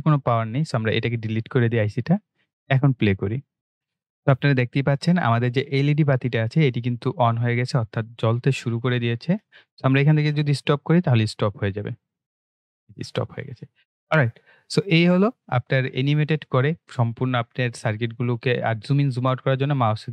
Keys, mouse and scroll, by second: 0.6 Delete, 3.1 click, 12.1 click, 17.7-18.2 scroll up 1, 18.2 scroll down 1, 19.0-19.5 scroll up 1, 19.5 scroll down 1.